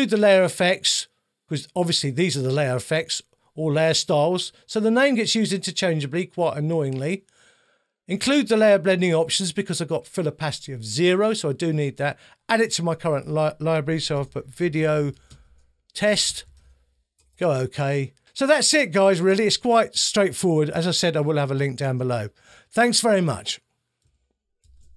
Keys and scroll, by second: 13.9-16.9 typing, 17.2 Return.